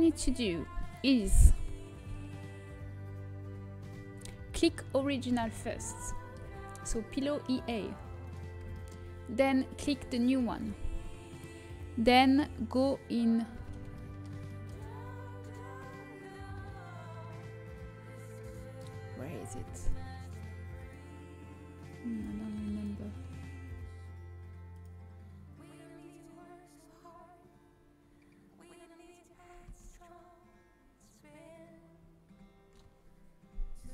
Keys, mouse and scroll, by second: 5.1-11.5 middle drag, 8.7-10.1 drag, 11.5 right click, 14.0-17.0 middle drag, 19.7-20.9 drag, 30.9 Tab.